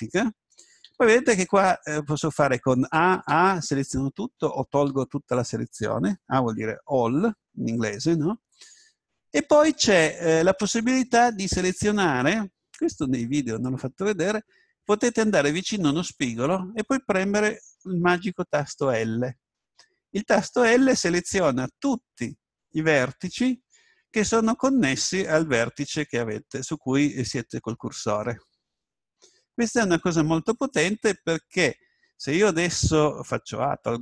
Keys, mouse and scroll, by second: 0.8 a, 1.4 a, 2.9 a, 3.3 a, 4.9 a, 9.0-11.7 middle drag, 20.0 l, 33.6 a.